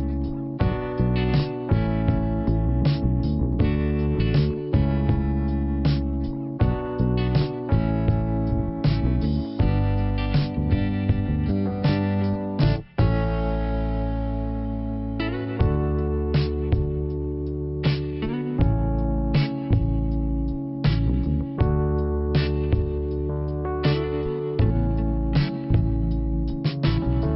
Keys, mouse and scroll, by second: 0.0 click, 2.4 click, 4.3 click, 6.0 click, 8.0 click, 10.1 click, 12.2 click, 12.3 click, 13.6 click, 15.8 click, 16.9-17.8 typing, 17.8 Return, 22.8 click, 26.1 n, 27.0 scroll up 1.